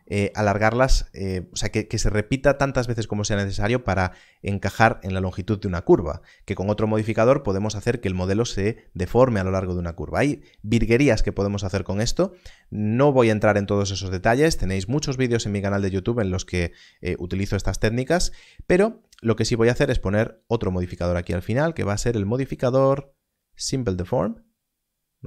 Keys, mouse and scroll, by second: 19.7 shift+click, 20.4 click, 24.1 click.